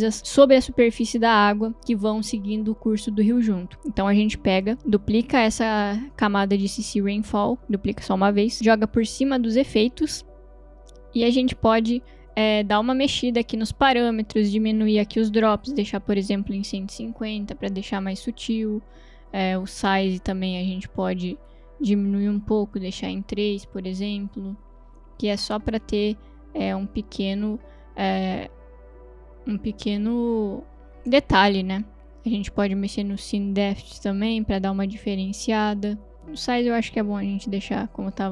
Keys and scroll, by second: 7.3 ctrl+d, 7.6 ctrl+z, 16.2-17.1 typing, 23.0 Return, 23.9 space, 27.8 space.